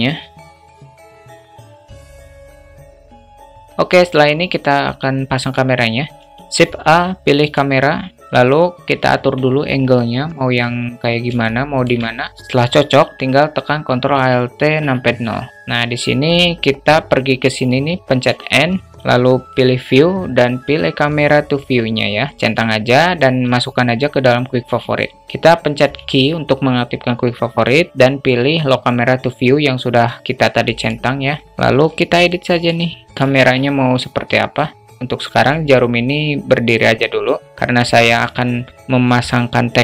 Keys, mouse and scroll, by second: 0.7 s, 1.0 Tab, 1.1 2, 1.4 middle click, 1.8 e, 2.3 ctrl+b, 3.0 Tab, 5.9 shift+a, 11.0 alt+shift+middle click, 14.3 ctrl+alt+KP_0, 17.7 n, 19.2 click, 22.0 space, 22.7 space, 24.7 space, 24.7 n, 28.5 q, 31.5 middle click, 31.8 shift+middle click, 32.9 shift+middle click, 37.1 q.